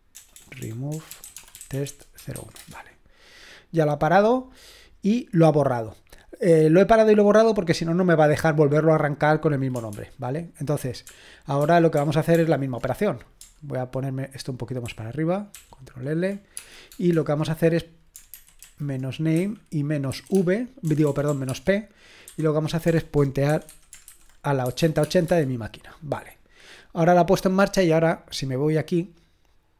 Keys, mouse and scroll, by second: 0.0-2.3 typing, 9.9 ctrl+p, 11.1 ctrl+p, 11.6 ctrl+p, 12.0 ctrl+p, 14.9 ctrl+k, 15.5 ctrl+l, 16.6 space, 18.3 alt+b, 18.6 alt+b, 19.4-25.3 typing, 28.5-29.7 drag.